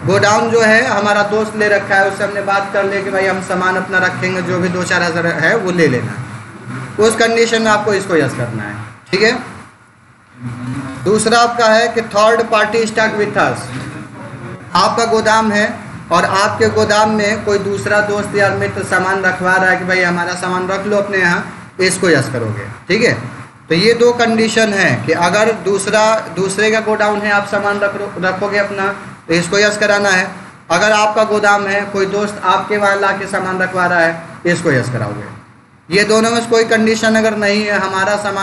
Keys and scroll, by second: 9.7 BackSpace, 10.5 n, 10.7 Return, 24.2 Up, 25.1 Down, 25.9 Up, 30.7 Down.